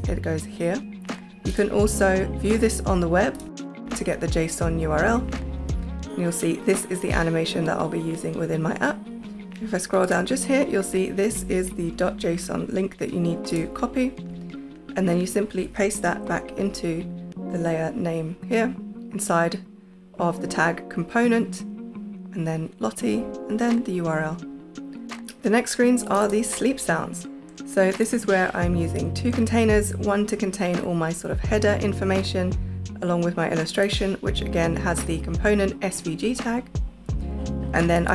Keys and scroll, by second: 11.6 Right, 16.0 super+y.